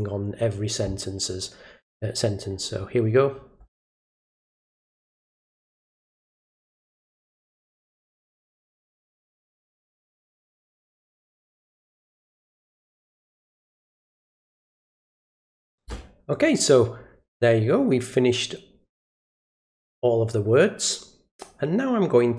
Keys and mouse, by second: 4.0 click, 4.2 click, 4.4 click, 4.6 click, 4.8 click, 5.0 click, 5.7 click, 6.0 click, 6.2 click, 6.3 click, 6.5 click, 6.8 click, 7.0 click, 7.1 click, 7.3 click, 7.5 click, 7.8 click, 7.9 click, 8.1 click, 8.4 click, 8.6 click, 9.0 click, 9.4 click, 9.6 click, 9.9 click, 10.1 click, 10.4 click, 10.6 click, 10.9 click, 11.1 click, 11.4 click, 11.5 click, 11.7 click, 12.0 click, 12.2 click, 12.5 click, 12.7 click, 13.0 click, 13.1 click, 13.3 click, 13.5 click, 13.7 click, 13.8 click, 14.2 click, 14.4 click, 14.8 click, 15.0 click, 15.3 click, 18.9-22.3 drag.